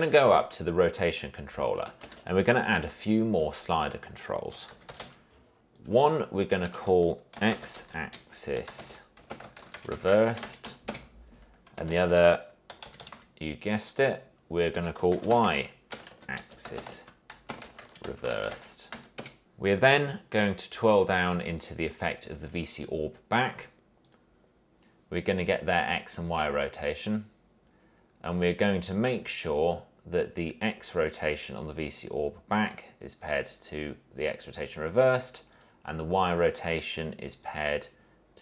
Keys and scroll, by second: 2.2 ctrl+space, 4.4-5.7 typing, 6.9 Return, 7.3-11.3 typing, 12.1 ctrl+space, 12.6-13.8 typing, 14.9 Return, 15.3-19.6 typing.